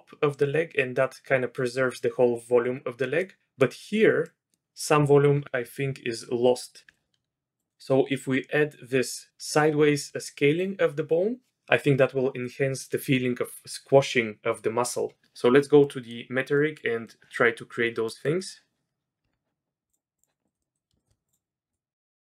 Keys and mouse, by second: 3.2-3.6 drag, 4.2-4.5 middle drag, 6.9 middle click, 7.1 click, 15.8 middle drag, 16.5-17.0 middle drag, 18.0 middle click, 19.2 Tab, 20.5 middle click, 20.6 click, 21.0 shift+click, 21.3 click.